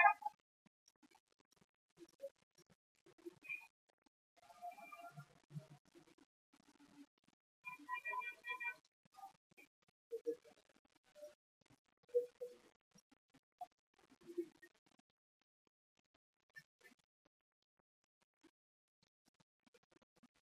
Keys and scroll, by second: 4.1 c, 5.9 b, 14.9 x, 16.9 x.